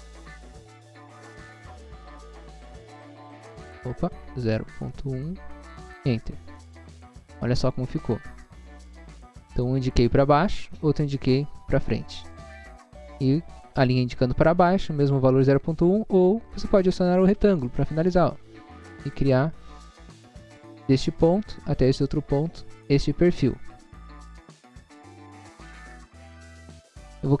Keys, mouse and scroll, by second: 0.3-1.3 typing, 1.9 Return, 3.0 scroll up 1, 4.4 0, 4.9 ., 5.4 1, 5.9 Return, 6.6 middle click, 9.4 middle click, 17.8 click, 19.2 click, 20.8 click, 22.0 click, 22.6 middle click, 26.3 middle click, 26.5 scroll up 1, 27.1 scroll up 1.